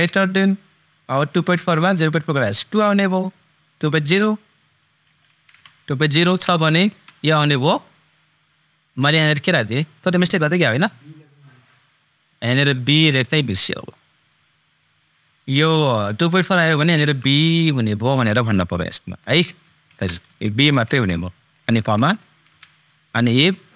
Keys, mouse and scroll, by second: 0.0 shift+super+., 6.5 super+., 14.1 super+click, 19.6 super+click, 20.6 shift+super+b.